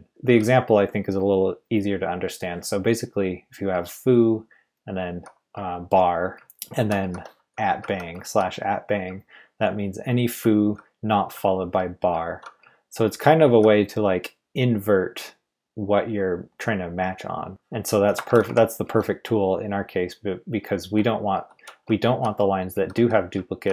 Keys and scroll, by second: 0.1 j, 0.2 j, 3.7 h, 3.9 h, 4.0 h, 4.0 h, 5.5-9.4 typing, 12.6-12.9 typing, 14.6 typing, 18.0-18.9 typing, 20.3-23.7 typing.